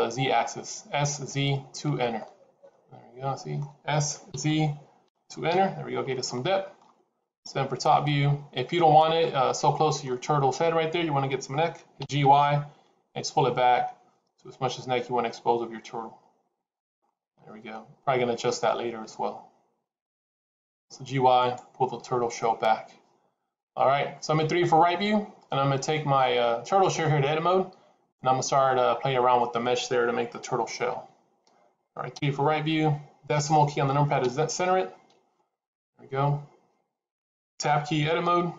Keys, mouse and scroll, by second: 2.0 middle click, 3.8 s, 6.1 middle click, 7.3 KP_7, 9.0 middle click, 10.2 scroll up 2, 11.9 g, 16.9 middle click, 32.0 KP_3, 34.1 KP_Enter, 34.1 KP_Decimal, 35.0 KP_Decimal, 37.6 Tab, 38.3-38.5 scroll up 1.